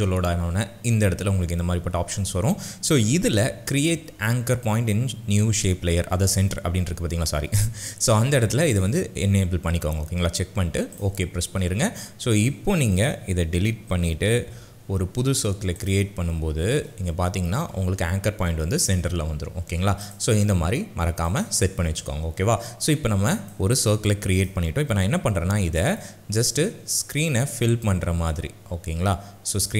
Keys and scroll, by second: 14.5 Delete, 25.1 s.